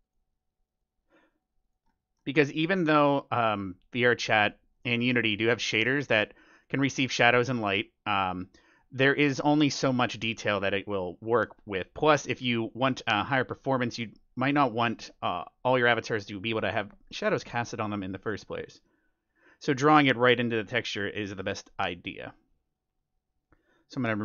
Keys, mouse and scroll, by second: 1.8-7.2 middle drag, 1.8 scroll up 1, 3.3 click, 6.6-17.8 drag, 7.2 middle click, 8.1-10.5 middle drag, 18.2-22.9 middle drag, 18.2-18.6 scroll down 1, 22.0-24.2 drag.